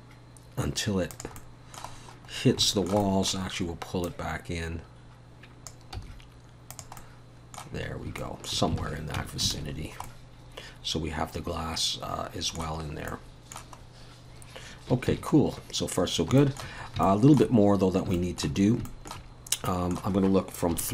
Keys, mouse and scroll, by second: 1.4 middle click, 1.9-2.6 scroll down 5, 2.6 shift+middle click, 3.0 middle click, 4.1 click, 6.0 s, 7.0 middle click, 7.9 scroll up 1, 8.2 shift+middle click, 8.8 alt+a, 9.2 Tab, 9.5 alt+a, 9.8-10.7 scroll down 3, 10.0 middle click, 12.8 scroll up 1, 13.1 middle click, 13.8-14.2 scroll up 2, 14.2-14.9 scroll down 1, 15.8 ctrl+s, 15.8-16.2 scroll down 2, 16.4 shift+middle click, 16.8 scroll up 2, 17.0 shift+middle click, 18.2 shift+middle click, 18.6 scroll up 2, 18.9 shift+middle click, 19.3 scroll up 1, 19.7 middle click, 20.7 KP_3.